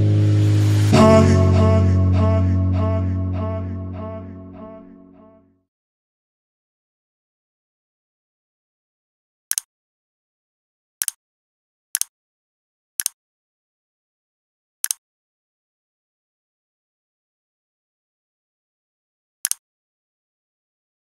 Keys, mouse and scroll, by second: 0.8 click.